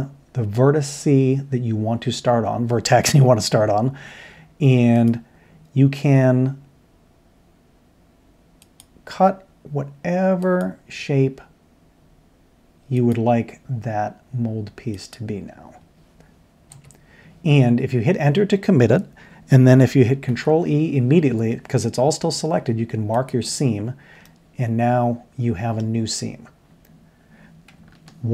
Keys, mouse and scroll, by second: 20.3 ctrl+e, 24.2-24.8 middle drag, 25.9-27.5 middle drag.